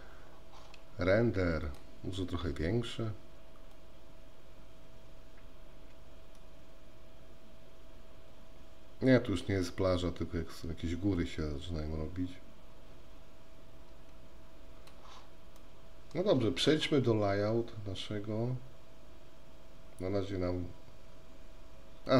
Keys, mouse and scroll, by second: 1.8-3.4 drag, 3.9-9.7 drag, 11.5-15.1 drag, 15.8 middle click.